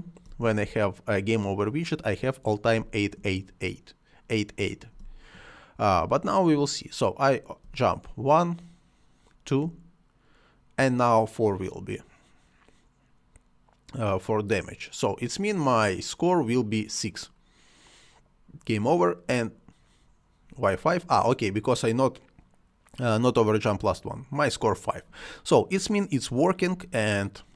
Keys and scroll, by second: 0.2 space, 2.8 space, 5.0 space, 7.6 space.